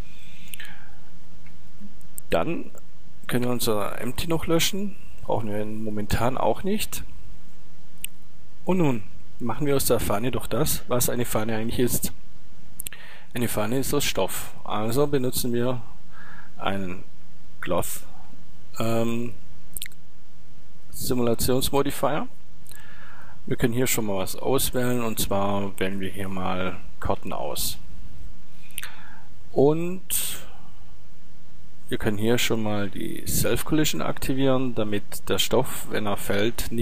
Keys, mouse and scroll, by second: 3.5 right click, 3.5 x, 8.1-9.3 drag, 9.9 click, 10.1 middle click, 13.3-14.5 middle drag, 14.5 click, 14.6-15.9 middle drag, 15.9 click, 16.2-17.3 middle drag, 19.2-21.3 drag, 21.3 middle click, 23.2 click, 25.1 middle click, 33.4-35.4 drag, 35.4 middle click.